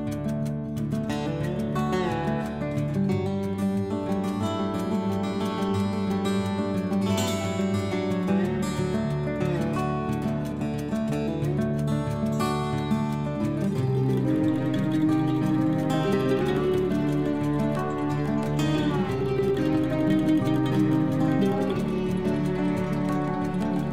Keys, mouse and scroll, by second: 0.0-2.8 typing, 6.4 Left, 6.8 Right, 9.0-10.5 typing, 12.0 BackSpace, 13.3-21.2 typing.